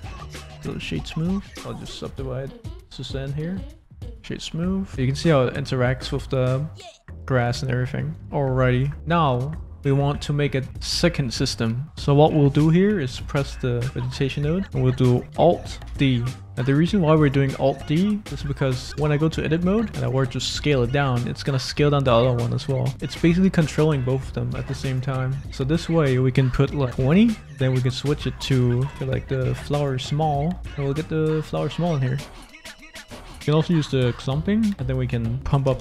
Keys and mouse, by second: 0.2-4.1 drag, 4.4 click, 4.4 middle click, 4.9 g, 4.9 z, 8.3 click, 13.4 click, 15.9 alt+d, 19.0 Tab, 19.9 a, 20.2 s, 23.6 Tab, 25.4-26.9 drag, 28.0-29.6 drag, 29.9 middle click, 32.6 click, 34.1 click, 34.7-35.8 drag, 35.7 0.